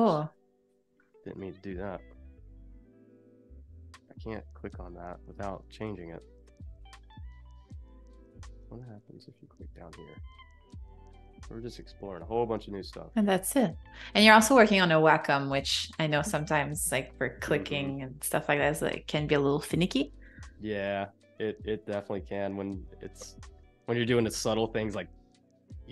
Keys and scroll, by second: 1.2 super+z, 6.4 Escape, 7.1 super+z.